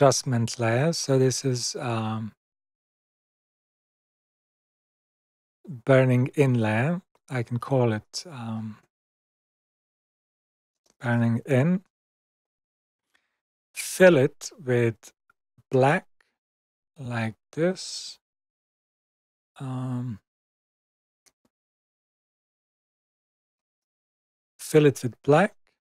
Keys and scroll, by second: 9.1-11.6 typing, 11.8 Return, 14.4 x, 15.7 super+BackSpace, 20.3 x, 23.5 super+BackSpace.